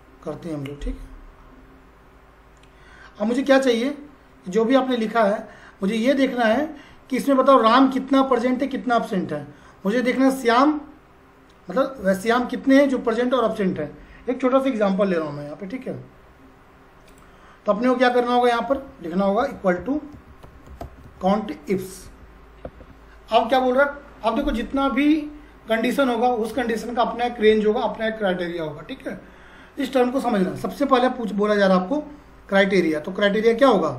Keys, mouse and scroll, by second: 4.1-4.9 scroll up 1, 4.9 click, 10.4 click, 12.8-14.9 drag, 17.0 click, 19.1-21.7 typing, 22.2 Down, 22.7 Tab.